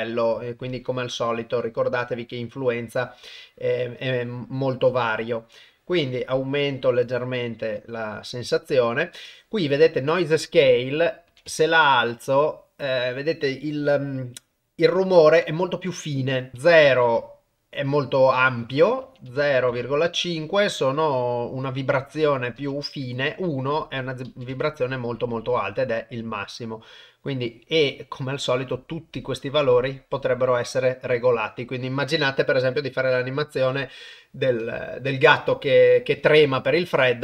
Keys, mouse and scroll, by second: 4.6 click, 10.7 click, 16.5 click, 18.4-19.7 drag, 22.2 click, 24.1 click, 25.6-33.5 drag, 36.7-37.2 drag.